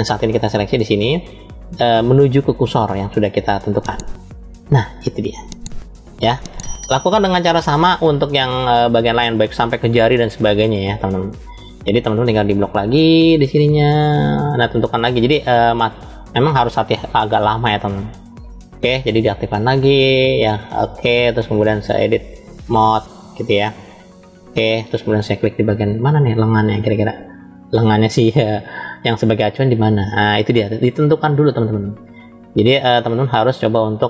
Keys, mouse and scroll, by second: 8.5-10.0 shift+middle drag, 10.5-11.7 scroll up 2, 11.7 middle click, 12.8-13.3 scroll down 2, 13.9-15.2 drag, 16.2-17.3 drag, 18.0 click, 21.6-24.2 drag, 25.3-28.0 middle drag, 28.4-29.9 scroll up 1, 29.9 scroll up 2, 30.1 middle click, 31.2-32.3 scroll down 2, 32.3-34.0 middle drag.